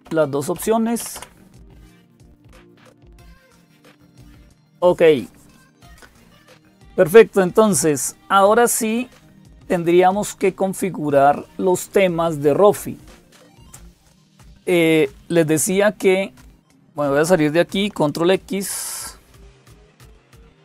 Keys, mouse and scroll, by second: 0.0-20.6 typing, 0.4 Up, 1.0 Down, 2.5 Down, 10.4 click, 19.1 ctrl+x.